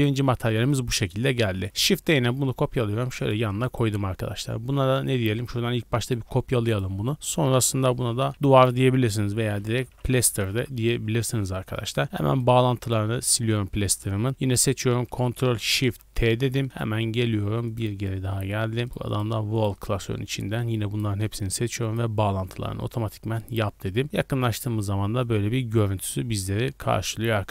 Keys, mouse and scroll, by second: 0.2 scroll down 2, 0.5-0.8 middle drag, 0.8-1.1 scroll down 2, 1.1-1.5 middle drag, 1.6 shift+d, 1.9 x, 2.5 y, 3.2 click, 3.6 right click, 5.2-6.0 scroll down 2, 6.0 click, 6.6-10.9 drag, 12.0-13.1 scroll down 4, 12.1 b, 13.1 x, 13.3-14.3 scroll up 4, 13.8 middle click, 14.5 click, 15.7 ctrl+shift+t, 24.0 scroll down 1, 24.1 middle drag, 24.4 click, 24.9-25.3 shift+middle drag, 25.3 scroll down 1, 26.1 click, 26.1 middle click, 26.4-26.9 scroll up 1, 26.9 middle click, 27.1 scroll up 1, 27.3-27.5 scroll down 2.